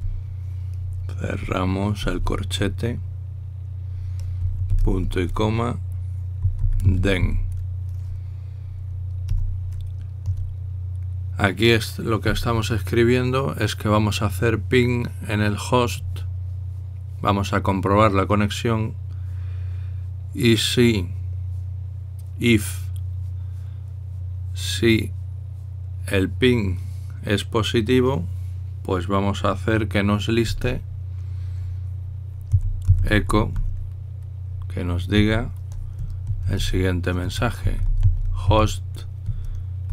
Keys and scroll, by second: 2.8 typing, 5.6 typing, 6.9-8.3 typing, 10.1 Return, 11.1 Tab, 31.3 Tab, 33.0-34.8 typing, 36.9 typing, 38.2-39.9 typing.